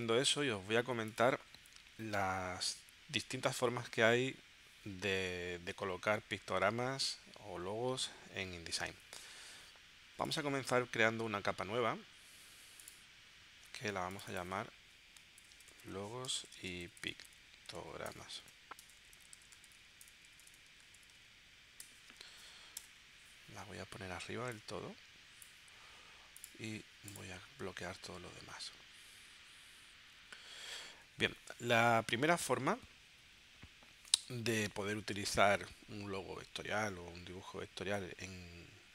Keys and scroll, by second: 15.2-21.6 typing, 22.9 Return.